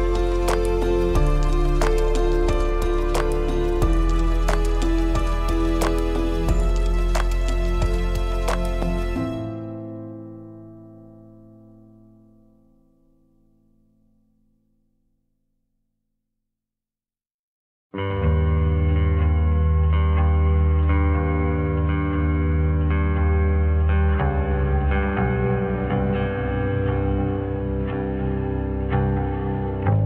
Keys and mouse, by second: 0.2 middle click, 0.6-1.1 shift+middle drag, 1.5 middle click, 7.3 shift+click, 8.1 shift+a, 13.1 shift+middle click, 13.3 shift+click, 14.7 g, 16.6 shift+middle drag, 17.3 shift+drag, 17.6 Tab, 18.4 click, 19.2 s, 22.2 Tab, 23.5 shift+click, 23.8 middle click, 25.0 shift+click, 25.3 middle click, 27.5 shift+click, 28.0-29.1 shift+drag, 29.2 middle click.